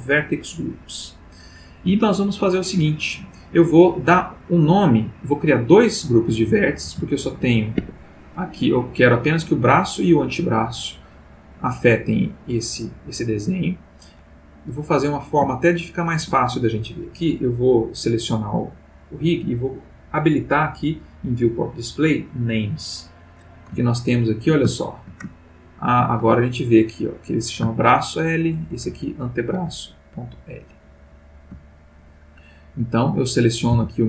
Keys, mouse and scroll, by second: 2.1-2.9 shift+middle drag, 3.4 click, 6.8 g, 7.8 Escape, 9.7 click, 10.4 click, 12.2 click, 13.0 click, 14.6 click, 15.5-16.4 shift+middle drag, 22.2 click, 23.8-24.6 ctrl+middle drag, 24.7-25.3 ctrl+shift+middle drag, 25.8 ctrl+shift+middle click, 27.8-28.4 shift+middle drag, 28.7 shift+middle click, 29.9-30.8 ctrl+middle drag, 30.9 ctrl+middle click, 32.6 click, 33.7 g.